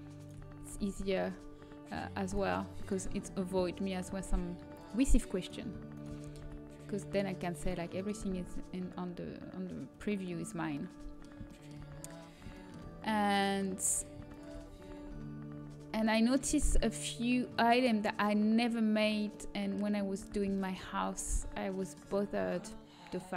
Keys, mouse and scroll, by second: 0.6 g, 2.8-4.7 drag, 4.2 g, 6.2 g, 8.2 g, 14.8 g, 20.5 a.